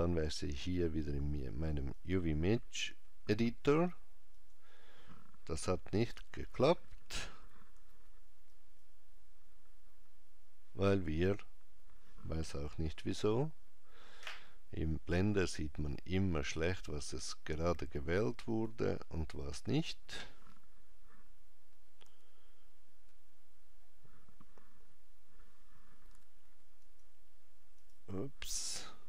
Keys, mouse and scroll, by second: 0.7 click, 4.4 click, 6.0 a, 18.6 click, 22.1 a, 27.8 click.